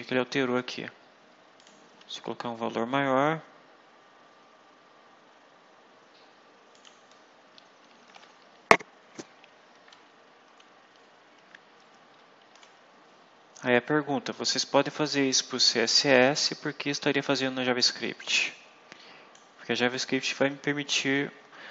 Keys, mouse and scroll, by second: 1.5 click, 1.8 1, 6.6 click, 7.7 BackSpace, 10.9 Delete, 15.1 click, 18.2-19.4 drag.